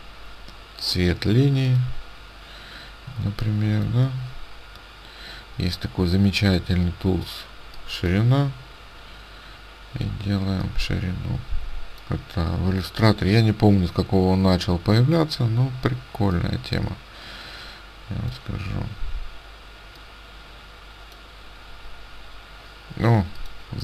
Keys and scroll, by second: 3.3 ctrl+space.